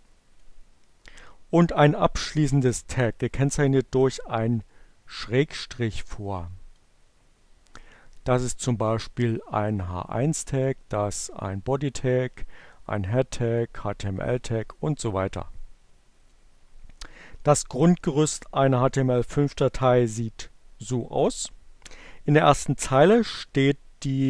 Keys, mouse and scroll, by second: 4.5-6.4 drag, 9.0-10.0 drag, 11.1 click, 12.4 click, 13.8 click, 16.2 click.